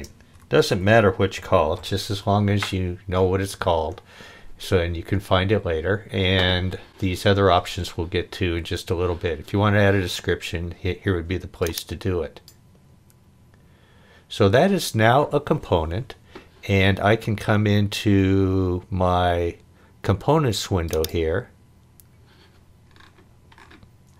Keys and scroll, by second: 0.0-1.8 typing.